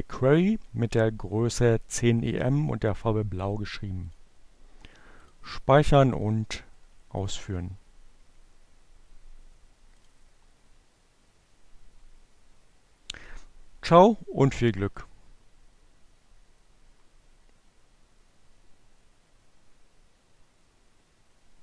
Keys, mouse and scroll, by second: 0.6 click, 2.8 click, 4.0 click, 5.2 click, 6.3 click, 9.3 click.